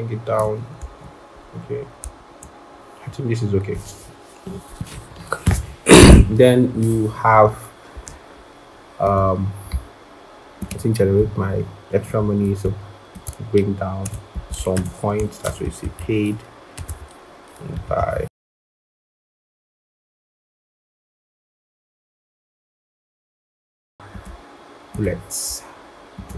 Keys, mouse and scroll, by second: 0.8 shift+Up, 1.5 Up, 1.7 Up, 11.4 scroll, 13.1 alt+click, 14.5 double click, 14.6 ctrl+a, 15.3-19.9 typing, 18.7 Return, 19.8 Return, 20.6 Return, 21.3 Return, 21.4-22.5 typing, 21.6 Down, 22.7 Return.